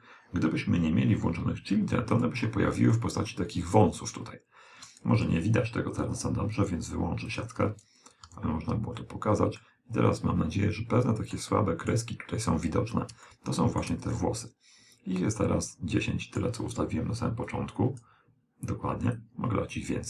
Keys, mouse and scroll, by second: 2.2 click, 3.0-4.7 middle drag, 5.3 n, 6.6-9.1 drag, 8.3 n, 9.0-11.5 middle drag, 11.6-15.9 middle drag, 17.5-20.0 drag.